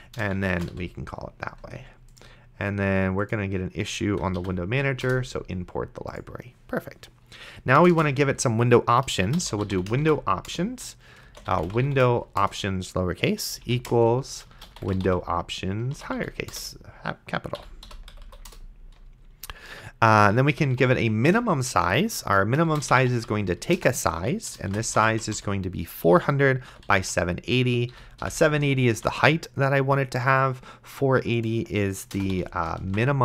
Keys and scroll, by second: 0.4-1.2 typing, 4.7 ctrl+., 5.0 Return, 7.8 Return, 9.1-12.4 typing, 10.5 Return, 12.4 Return, 13.5-16.2 typing, 16.5 Return, 17.6 End, 17.9 ;, 18.1 Left, 18.5 Return, 20.2-21.5 typing, 22.6-28.2 typing, 27.9 End, 29.2 ctrl+s, 32.1 BackSpace, 32.3 ,, 33.1 ctrl+s.